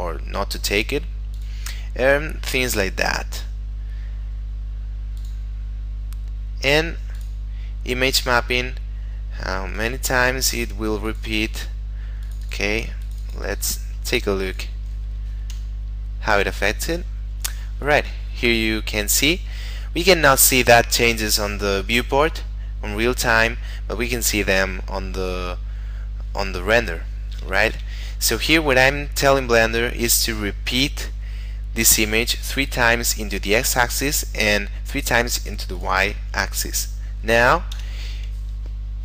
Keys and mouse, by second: 1.3 click, 3.9 middle click, 5.2 click, 5.6 middle click, 7.2 click, 9.8 click, 15.5 F12, 27.7 Escape, 35.7 click, 37.7 F12.